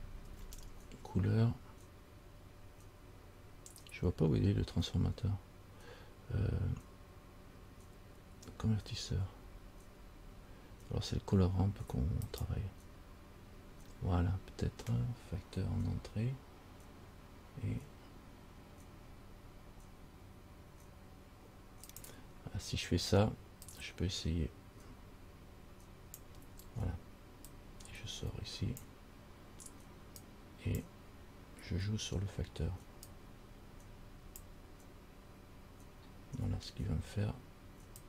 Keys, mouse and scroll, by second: 0.4 shift+a, 23.8 click, 27.7 click, 30.4 click, 30.5 click, 33.4 click.